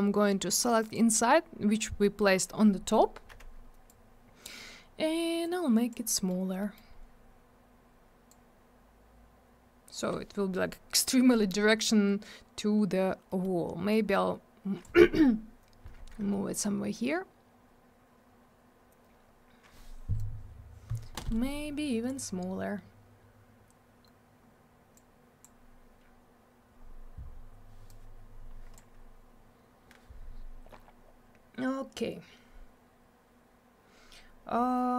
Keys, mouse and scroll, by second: 0.9 click, 0.9 click, 1.2 scroll down 1, 2.0 middle click, 2.2 middle click, 2.3 scroll up 1, 3.9 click, 5.4 click, 6.1 middle click, 6.4 scroll down 1, 6.6 middle click, 6.8 middle click, 6.9 scroll up 1, 8.3 click, 13.3 middle click, 13.4 middle click, 13.9 click, 20.2 click, 24.9 click, 27.9 click.